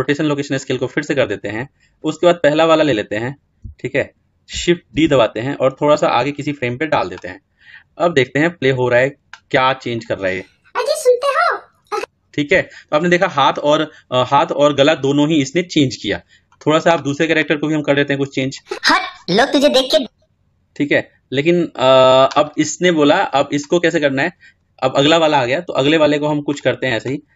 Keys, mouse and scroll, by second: 4.7 shift+d, 9.0-16.4 drag, 19.7-22.1 drag, 26.4-27.3 drag.